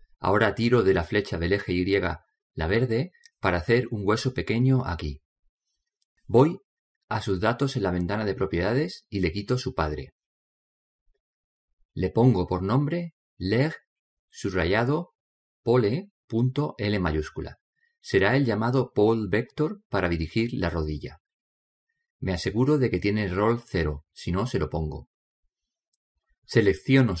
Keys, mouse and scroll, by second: 0.7 click, 2.6 click, 9.2 click, 11.6-15.3 drag, 27.0 right click.